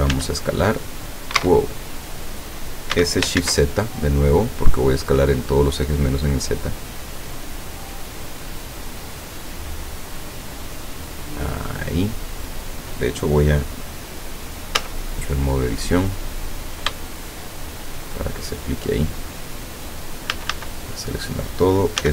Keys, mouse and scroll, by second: 0.1 s, 1.4 Escape, 2.9 s, 3.4 shift+z, 5.5 click, 6.6-8.1 drag, 8.5-9.9 middle drag, 10.7-11.7 drag, 14.9 Tab, 16.0-16.5 scroll up 2, 17.1 shift+middle click, 17.5 shift+middle click, 20.4 a, 22.0 s.